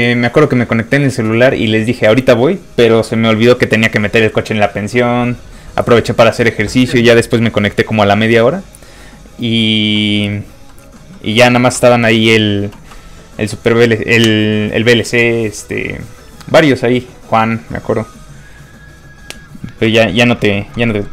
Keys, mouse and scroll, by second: 11.8 middle click, 12.1 shift+middle click, 20.9 middle click, 21.0 middle click.